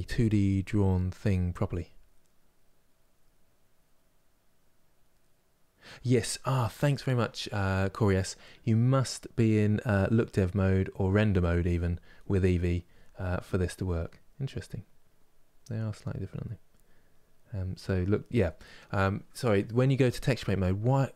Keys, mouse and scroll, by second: 10.8 click, 11.8-13.0 middle drag, 13.0 click, 13.4 click, 13.8 click, 14.1 click, 15.2 click, 16.3 click, 17.6 click, 18.1-20.8 middle drag, 20.8 click.